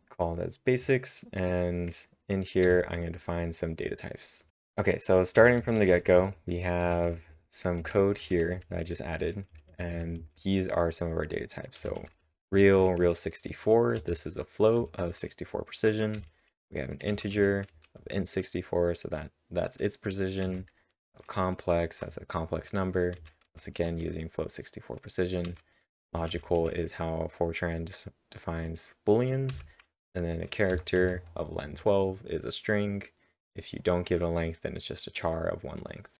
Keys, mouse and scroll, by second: 2.6 typing, 4.2-5.4 typing, 8.2-10.7 typing, 14.7-18.2 typing, 20.2-20.9 typing, 23.1-23.9 typing, 25.2-26.5 typing, 29.5 j, 30.7 w, 36.0-36.1 typing.